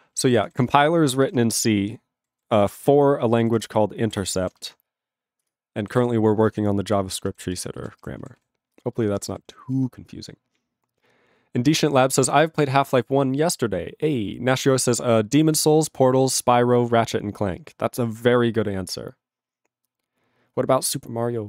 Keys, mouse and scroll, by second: 0.3 ctrl+s, 0.5 ctrl+a, 0.6 ctrl+space, 0.7 ctrl+e, 0.7 ctrl+g, 3.7 ctrl+Return, 4.3 ctrl+s, 5.5 ctrl+Return, 6.0 ctrl+s, 7.2 ctrl+n, 7.3 ctrl+b, 7.5 ctrl+space, 7.9 ctrl+alt+b, 8.0 ctrl+g, 8.4 ctrl+s, 8.8 ctrl+space, 9.2 ctrl+alt+f, 9.3 ctrl+g, 9.7 ctrl+s.